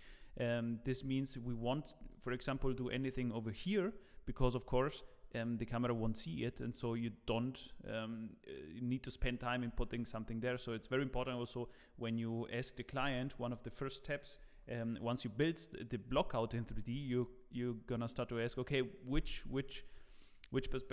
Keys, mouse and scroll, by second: 0.4-0.8 scroll down 1, 1.1 shift+middle click, 2.6 shift+right click.